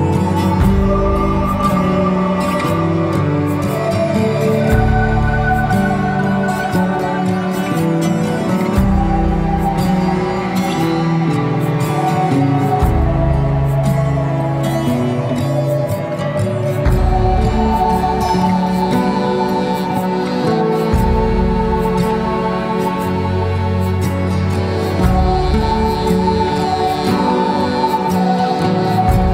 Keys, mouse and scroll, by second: 2.3 click, 6.6-19.6 drag, 20.0 click, 22.4-26.8 drag, 26.8 s, 28.9-29.3 scroll down 2.